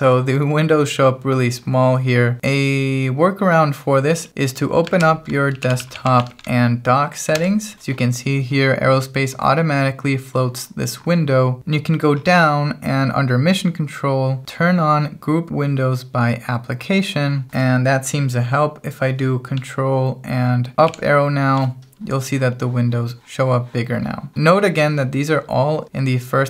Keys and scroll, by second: 5.0 super+space, 5.3-6.7 typing, 7.4 Return.